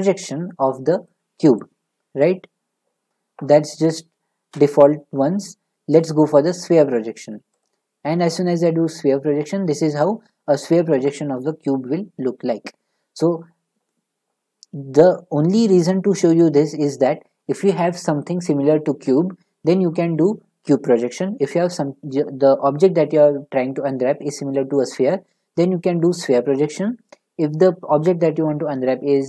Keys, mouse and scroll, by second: 4.5 click, 4.5 u, 7.6 click, 8.9 middle click.